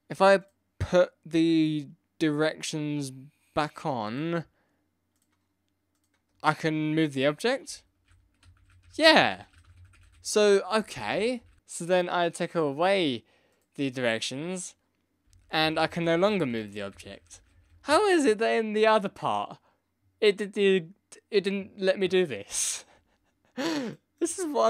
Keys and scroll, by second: 7.6 Left, 8.0 Right, 8.4 Down, 8.5 Left, 8.8 Right, 9.1 Left, 9.1 Down, 9.5 Right, 9.7 Left, 9.7 Down, 9.9 Left, 10.0 Right, 10.2 Up, 10.7 Down, 10.9 Left, 11.1 Up, 11.3 Right, 11.5 Left, 15.2 Down, 15.3 Right, 15.4 Left, 15.6 Up, 15.6 Right, 15.7 Left, 15.8 Down, 15.8 Right, 16.2 Up, 16.2 Down, 16.3 Left, 16.3 Down, 16.5 Left, 16.7 Right, 16.8 Up, 16.9 Left, 17.0 Down, 17.2 Left, 17.3 Down, 17.5 Left, 17.7 Down.